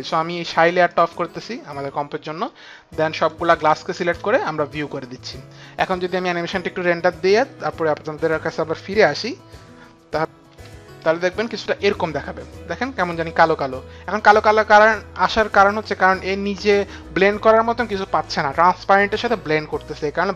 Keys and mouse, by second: 1.4 click, 5.2 click, 11.2 F9, 12.0 space, 13.5 click, 15.9 click, 16.9 click.